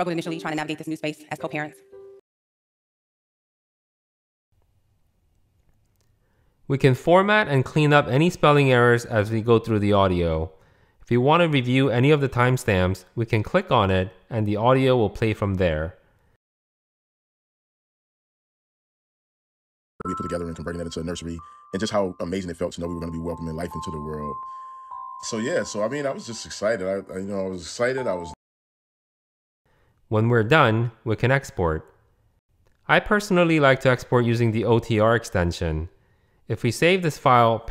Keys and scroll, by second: 2.1 ⟲, 8.1 super+b, 10.9 super+b, 13.8 super+b, 19.8 Escape, 22.3 super+3, 22.6 super+3, 22.9 super+3, 23.3 super+3, 28.2 Escape.